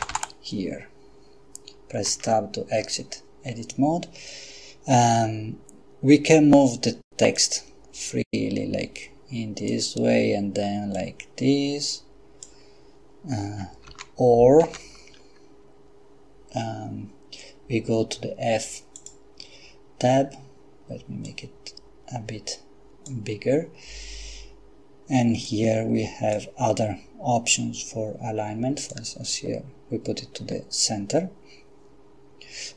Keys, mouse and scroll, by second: 0.0-0.1 typing, 2.1 Tab, 7.4-10.1 drag, 10.9-12.9 drag, 13.9 ctrl+z, 14.6 ctrl+z, 19.0 click, 21.2-23.6 drag, 25.5 click, 28.8 click.